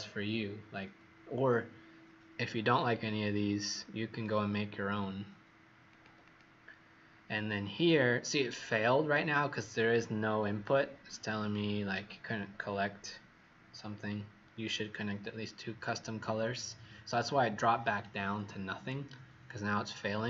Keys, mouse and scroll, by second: 2.6 click, 6.2 click, 11.3 click, 11.9-12.4 scroll down 1, 12.4-13.0 scroll down 2, 19.7-20.2 scroll up 1.